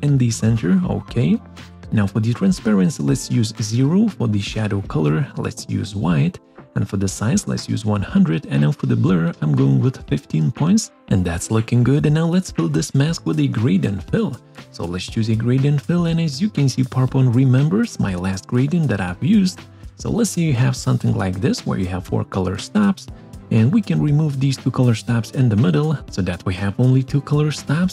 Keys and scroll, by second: 11.3 Return.